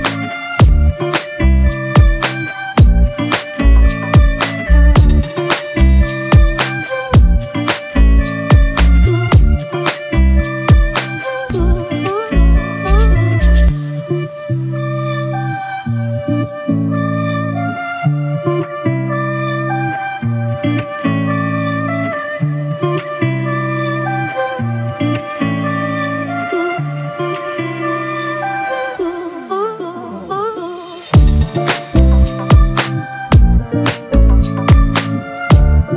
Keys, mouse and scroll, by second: 1.2 ctrl+click, 1.8 space, 3.6 ctrl+click, 4.8 ctrl+click, 6.1 ctrl+click, 6.6 space, 7.4 ctrl+click, 8.5 ctrl+click, 9.1 ctrl+click, 11.7 ctrl+click, 12.5 ctrl+click, 13.6 ctrl+click, 15.1 space, 15.1 ctrl+click, 17.0 ctrl+click, 18.6 ctrl+click, 19.3 ctrl+click, 20.6 space, 20.6 ctrl+click, 21.6 ctrl+click, 22.3 ctrl+click, 22.9 ctrl+click, 24.4 ctrl+click, 25.7 ctrl+click, 27.6 space, 28.7 ctrl+click, 29.2 space, 30.1 ctrl+click, 31.3 ctrl+-, 31.5 ctrl+-, 31.6 ctrl+-, 31.8 ctrl+-, 33.1 double click.